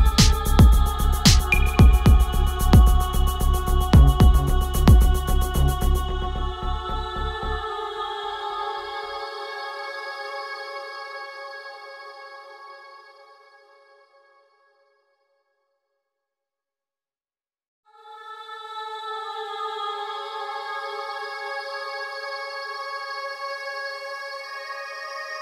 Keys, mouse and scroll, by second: 0.9 Return, 1.9-7.1 drag, 7.1 ctrl+t, 7.9-9.6 drag, 9.6 Return, 12.5 click, 15.2 click, 21.5 click, 23.2 shift+o, 23.6 shift+r, 25.2-25.4 typing.